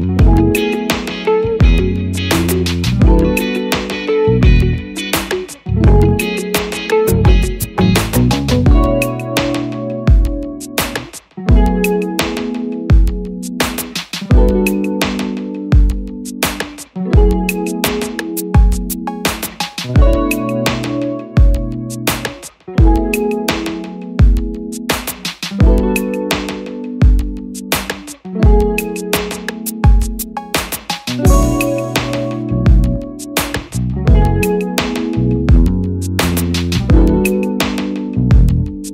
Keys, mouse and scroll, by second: 0.5 click, 5.2 double click, 30.8 double click.